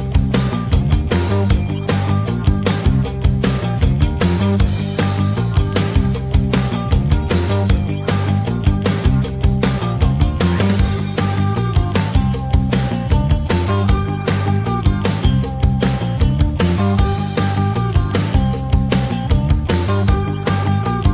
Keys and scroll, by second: 10.4 ctrl+k, 18.4 c.